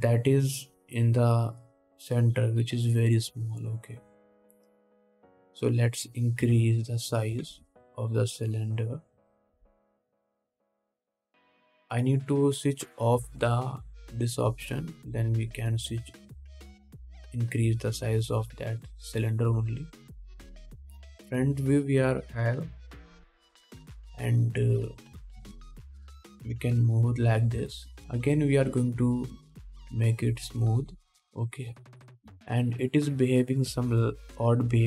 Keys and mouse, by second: 0.3-12.0 drag, 2.8-5.3 middle drag, 2.8-5.3 right drag, 6.8 middle click, 6.8 right click, 7.7 s, 8.7 ctrl+z, 10.0 middle click, 10.0 right click, 10.8 s, 11.9 ctrl+z, 14.6 middle click, 15.9 s, 17.8 s, 21.7 KP_1, 24.8-34.8 drag, 25.2 s, 26.6 g.